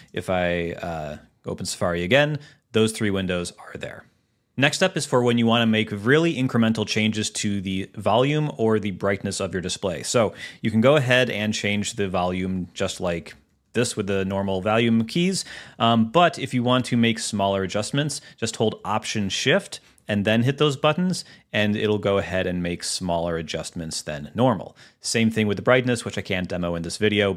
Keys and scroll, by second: 0.1 alt+space, 1.2 Return.